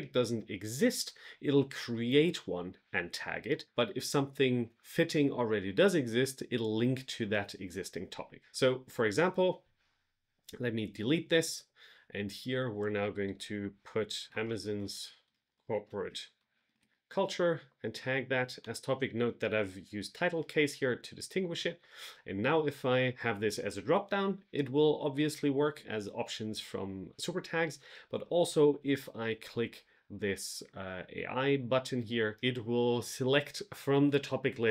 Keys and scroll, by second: 14.3 space, 14.5 shift+c, 15.7 space, 15.9 shift+c, 17.1 shift+3, 18.5 Return.